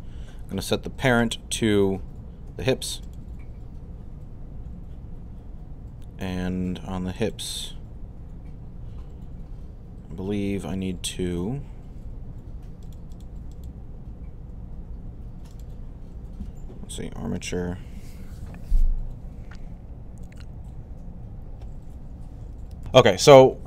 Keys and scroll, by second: 22.7 super+n.